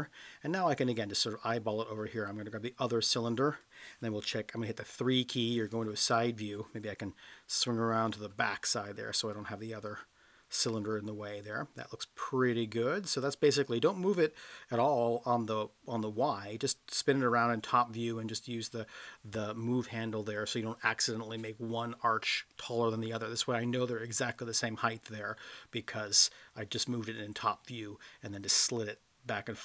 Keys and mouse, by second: 1.3-3.6 drag, 4.9 KP_3, 7.4 KP_9, 9.3-13.1 drag, 23.1-26.0 middle drag.